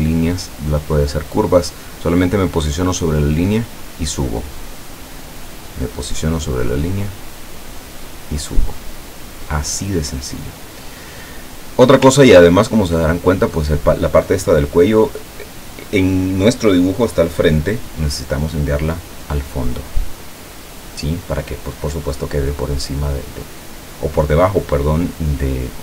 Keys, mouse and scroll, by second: 2.6-5.5 drag, 6.6-8.9 drag, 11.7 click, 12.4-12.8 ctrl+scroll down 4, 13.4 ctrl+scroll up 3, 20.0 click.